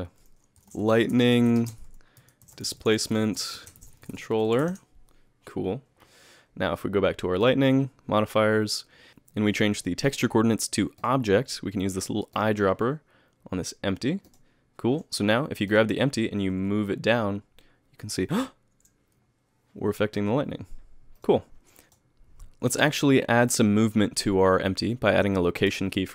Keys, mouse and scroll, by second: 4.4 l, 13.0 click, 15.7 click, 16.4 g, 21.8 alt+a, 21.8 click, 23.6 click, 25.7 i.